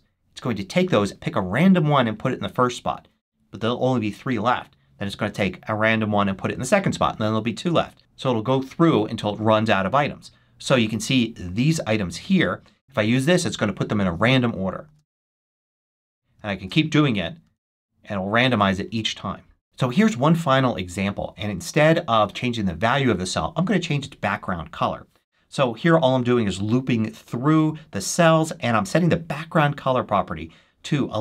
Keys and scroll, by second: 14.7 shift+super+1, 16.5 shift+super+1.